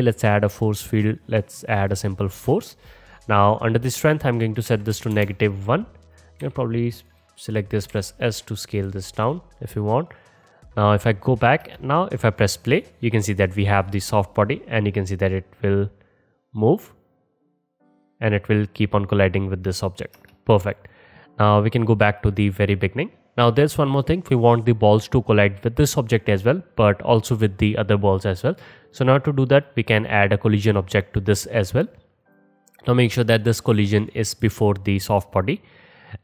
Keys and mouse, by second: 3.9-6.2 drag, 6.4 s, 7.5 click, 7.9 s, 9.2 click, 10.0-10.5 middle drag, 10.5-24.6 drag, 11.7 space, 20.2 space, 24.6-29.7 middle drag, 29.7-36.2 drag.